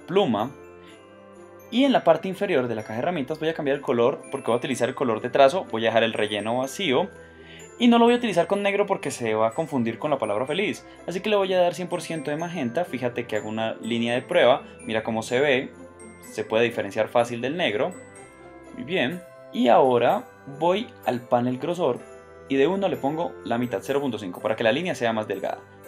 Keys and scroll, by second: 17.2 v, 18.6 BackSpace.